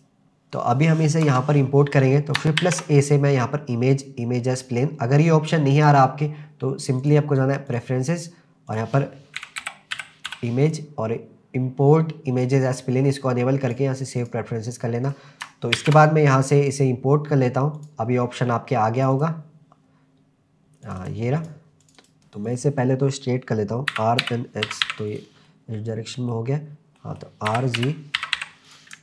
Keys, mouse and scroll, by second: 1.2 KP_0, 2.6 shift+a, 7.0-7.9 drag, 15.8 shift+a, 22.2 middle click, 22.5 click, 23.9 r, 24.2 x, 24.7 9, 24.8 0, 25.1 click, 25.5-26.4 middle drag, 27.0 middle click, 27.5 r, 27.8 z, 28.2 9, 28.4 0, 28.7 click.